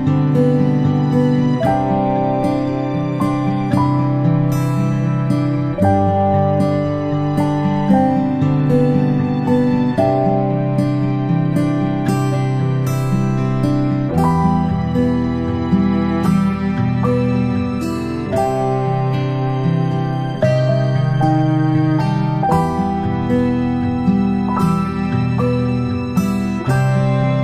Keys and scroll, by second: 0.3 ctrl+shift+[, 0.6 ctrl+], 1.2 ctrl+], 1.3-2.8 ctrl+], 2.8 ctrl+[, 3.7 ctrl+], 5.4 ctrl+[, 6.0 ctrl+], 6.5-9.7 ctrl+], 13.5 ctrl+shift+[, 13.8 ctrl+shift+], 20.2 ctrl+shift+z, 23.3 ctrl+shift+z, 24.1 ctrl+g, 26.5 ctrl+shift+[, 26.9 ctrl+].